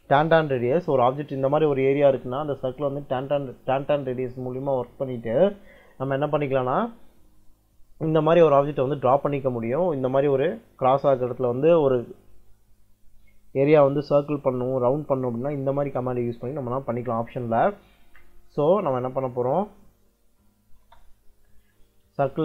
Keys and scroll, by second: 20.5 e, 20.7 space, 22.0 c, 22.3 space.